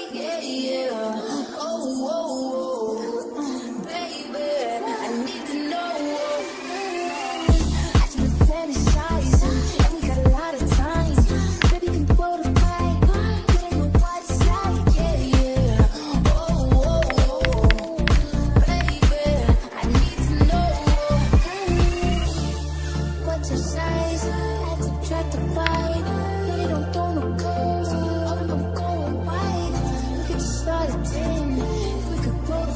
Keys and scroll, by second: 11.7 0, 17.6-18.7 typing, 25.7 0.